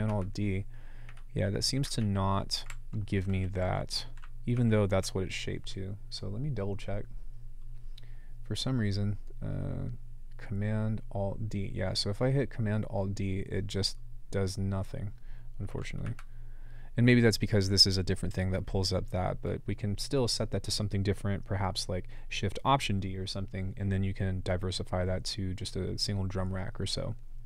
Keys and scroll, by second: 4.6 ctrl+alt+d.